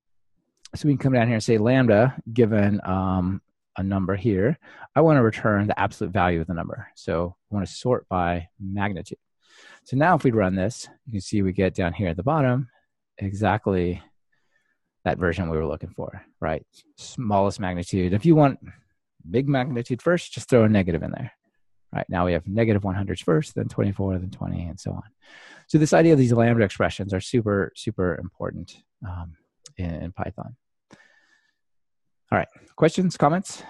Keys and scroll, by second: 1.4 Return, 7.1 Escape, 10.0 ctrl+r, 20.7 ctrl+r.